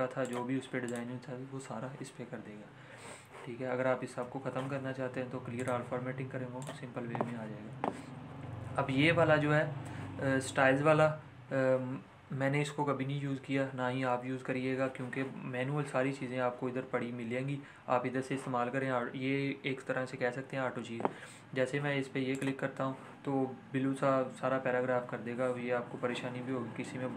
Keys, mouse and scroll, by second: 4.5 ctrl+a, 5.5 click, 9.8 ctrl+a, 22.3 click, 25.3 click, 25.5 ctrl+z.